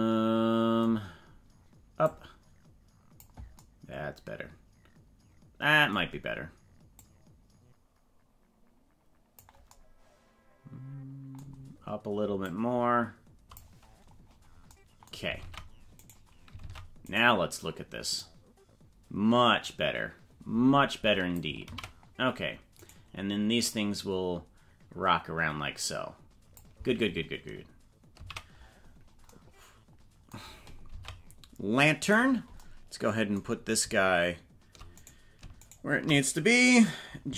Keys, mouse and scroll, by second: 0.7-1.0 scroll, 2.0-3.3 drag, 6.9-9.3 drag, 12.5-13.5 drag, 14.3 scroll down 4, 15.3 ctrl+Tab, 16.0 right click, 16.6 ctrl+Tab, 17.1 right click, 18.1-21.3 drag, 21.9 ctrl+z, 22.9 right click, 23.7-26.5 drag, 28.3 ctrl+z, 28.9 scroll down 4, 30.9 ctrl+Tab, 32.0 right click, 34.9 right click, 35.6 shift+right click.